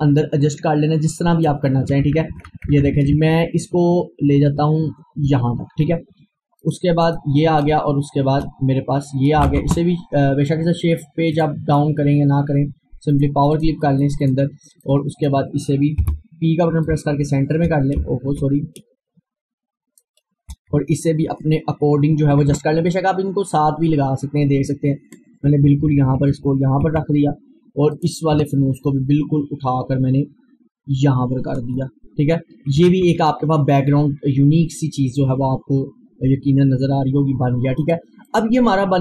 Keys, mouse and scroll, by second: 2.0 Right, 6.7-9.6 drag, 9.6 shift+Page_Down, 10.5 click, 11.4 right click, 13.2 click, 16.0 p, 16.9-20.8 drag, 20.7 Right, 28.0 click, 28.3 Left, 36.1 Left, 37.8 click, 38.8 scroll down 1.